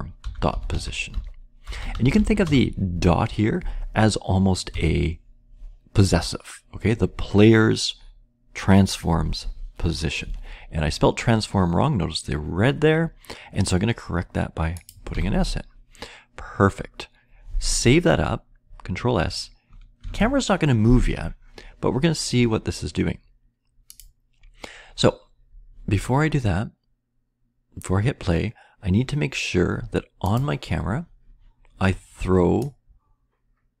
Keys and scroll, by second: 0.0-2.9 typing, 4.4-5.2 typing, 14.8-15.6 typing, 19.9 ctrl+s.